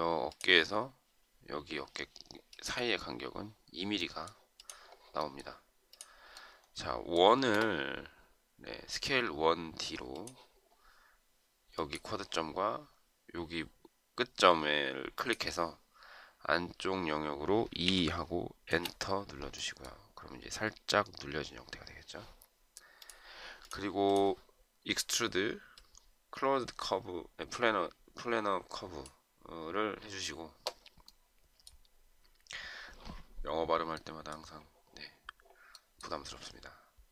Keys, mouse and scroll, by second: 17.9 2, 18.7 Return.